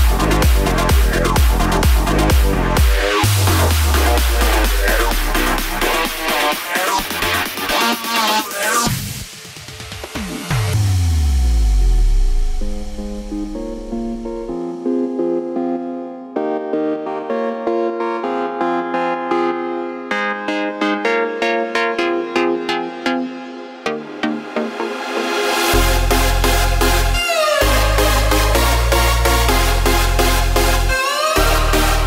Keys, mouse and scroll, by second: 1.1 r, 9.1 i, 11.3 KP_0, 13.8-15.1 drag, 15.1 space, 20.1 space, 21.1-24.5 drag, 24.5 space, 28.4 space, 29.7-32.0 drag.